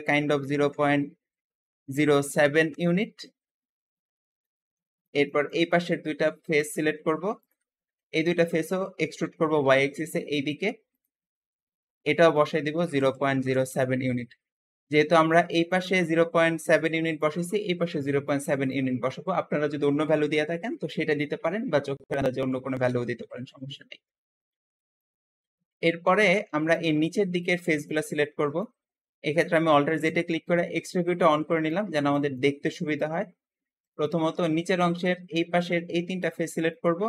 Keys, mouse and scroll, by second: 0.1-2.1 typing, 2.6 Return, 2.6 Return, 3.5-4.1 scroll down 2, 4.1-6.4 middle drag, 6.4 click, 7.3 shift+click, 7.7-9.1 shift+middle drag, 9.1 e, 9.5 y, 12.2-15.0 drag, 12.7-13.6 typing, 13.9 Return, 13.9 Return, 15.0-22.9 shift+middle drag, 15.8 `, 22.9 Escape, 23.9-25.1 middle drag, 25.1 scroll down 1, 25.4 middle click, 26.1-26.4 scroll up 1, 26.4 middle click, 27.3 click, 27.7 shift+click, 28.1-29.9 shift+middle drag, 29.9 alt+z, 30.5-33.1 alt+middle drag, 33.1 scroll up 1, 33.7 shift+click, 34.0-36.0 shift+middle drag, 36.0 shift+click, 36.6-37.0 shift+middle drag.